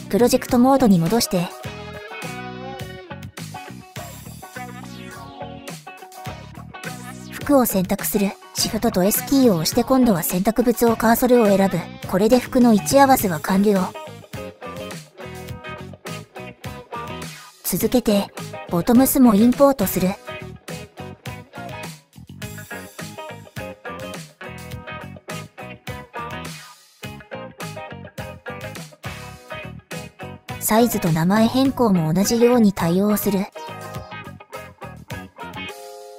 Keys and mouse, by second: 0.0 shift+s, 5.4 click, 7.6 shift+click, 9.7 click, 13.8 shift+s, 14.9 click, 15.6-17.9 middle drag, 18.9-22.4 drag, 33.6 click, 34.9 click, 35.6 click, 35.8 shift+click.